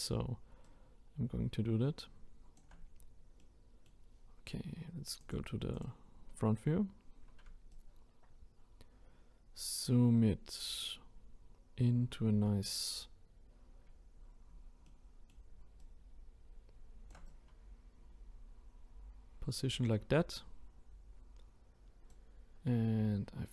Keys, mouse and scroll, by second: 0.6-3.4 shift+right drag, 3.4-5.2 middle drag, 5.2 click, 5.7-7.7 drag, 7.7-10.9 shift+right drag, 14.8-15.7 shift+middle drag, 15.7-20.4 shift+right drag, 23.1 scroll up 2.